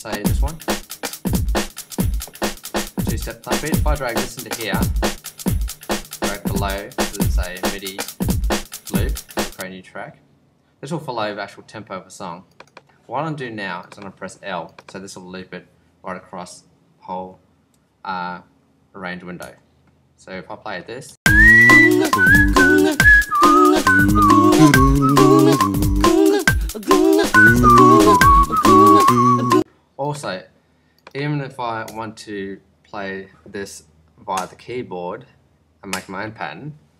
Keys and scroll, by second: 19.4 |, 21.1 space, 28.9 |, 29.4 space, 31.9 BackSpace.